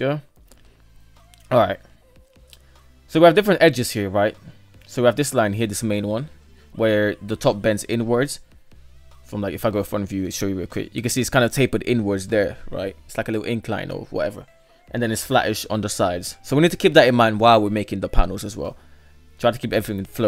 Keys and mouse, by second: 0.1 middle click, 0.7 KP_3, 1.3 Tab, 1.4 KP_3, 3.2 shift+middle click, 7.5 shift+middle drag, 7.8 middle click, 8.7 KP_1, 17.0-17.6 middle drag, 18.3 KP_3, 18.7 alt+z, 19.6 shift+middle click, 20.0 right click.